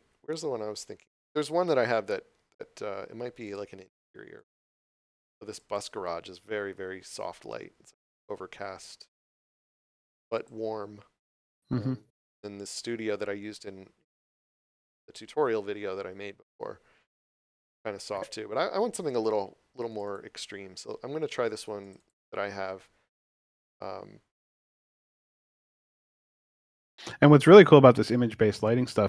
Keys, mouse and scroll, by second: 3.4 click, 10.3 click, 17.7 click, 25.6 click.